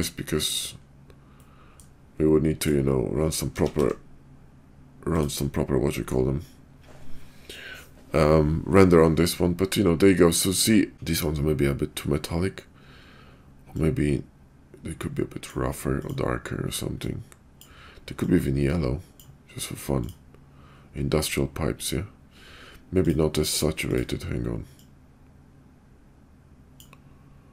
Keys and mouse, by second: 1.4 middle click, 2.6 click, 3.6 s, 5.6 click, 13.7-15.5 drag, 16.0 click, 20.0 click, 23.0 click, 23.9 click.